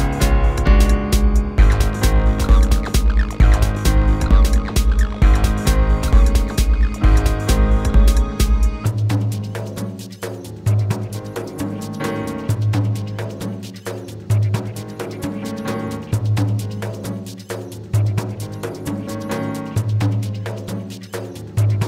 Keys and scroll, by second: 8.6 Return, 9.7 space, 15.1 space.